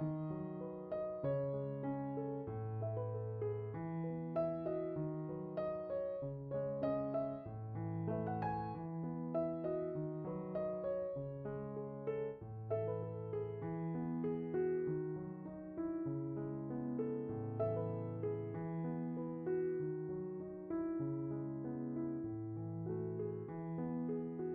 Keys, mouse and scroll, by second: 3.6 click, 4.0 x, 4.1 z, 4.8-5.6 middle drag, 6.1 right click, 6.8-10.1 middle drag, 13.6-18.8 middle drag.